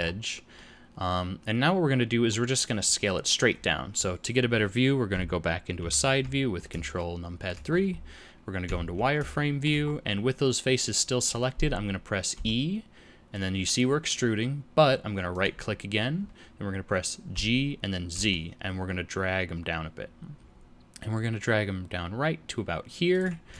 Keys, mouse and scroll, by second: 0.0-0.5 scroll up 4, 0.5 middle click, 3.5-5.1 scroll down 7, 5.1-5.6 scroll down 3, 5.7 ctrl+KP_3, 6.9 shift+middle click, 7.7-8.1 scroll up 3, 8.6 z, 9.2 shift+middle click, 9.8-10.7 scroll up 2, 12.3 e, 17.3 g.